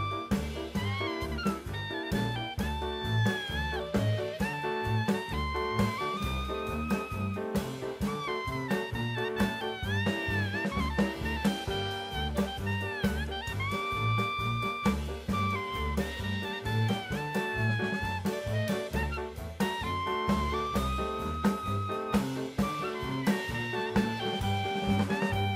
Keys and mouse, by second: 1.1 Tab, 1.8 2, 1.9 click, 3.3 click, 4.0 click, 5.0 click, 5.7-6.2 drag, 7.3 click, 8.0 Tab, 8.8 shift+d, 9.6 r, 11.1 x, 11.8 KP_9, 11.9 KP_0, 12.3 Return, 13.2-15.1 drag, 15.3-17.3 middle drag, 18.4-19.7 drag, 20.5 shift+middle click, 21.0 click.